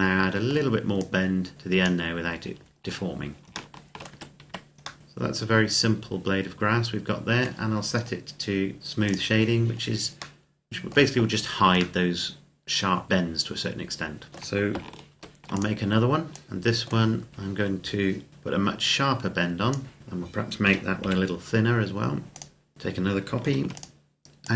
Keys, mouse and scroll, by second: 0.8 click, 2.7-3.3 scroll down 1, 3.5 shift+middle click, 3.9 Tab, 4.2 z, 4.9 middle click, 5.0 middle click, 7.9-8.8 scroll down 1, 8.8 click, 9.5-10.4 scroll down 1, 10.4 middle click, 15.1 shift+d, 15.4 click, 16.4 middle click, 17.3 ctrl+KP_Add, 18.2 KP_1, 18.3 click, 20.0 middle click, 20.4-20.8 typing, 22.1 click, 22.6 scroll down 1, 22.7 right click, 23.2 shift+d, 23.5 click.